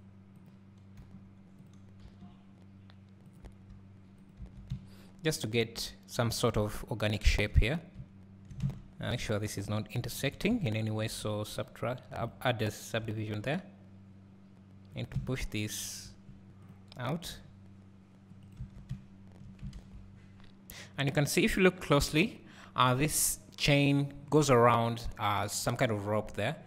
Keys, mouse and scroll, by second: 0.0 click, 1.0 g, 4.5 click, 9.6 click, 10.9 shift+click, 13.1 g, 15.1 click, 16.7 click, 17.3 g, 18.5 right click, 18.6 Tab.